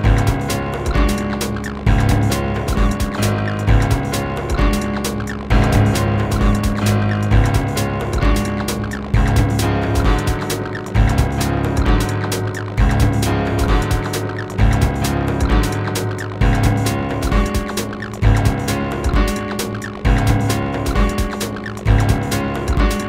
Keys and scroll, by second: 2.7 space.